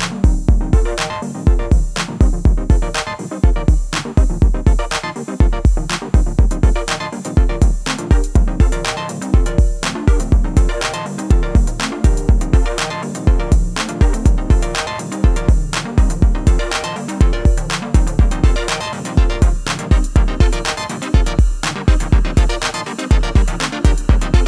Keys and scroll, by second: 9.5 Return, 10.9 ctrl+shift+[, 15.2 ctrl+=.